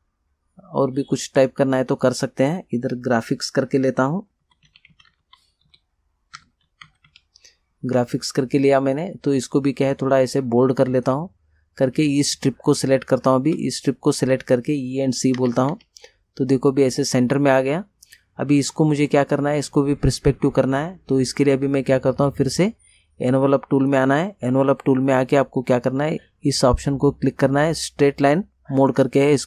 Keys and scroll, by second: 4.2-7.6 typing, 15.5 e, 15.8 c.